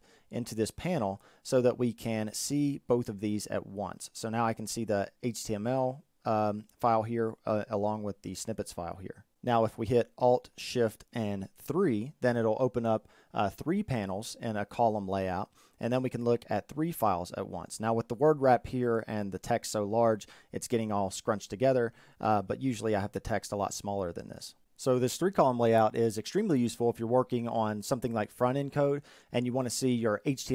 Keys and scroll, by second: 10.1 alt+shift+3.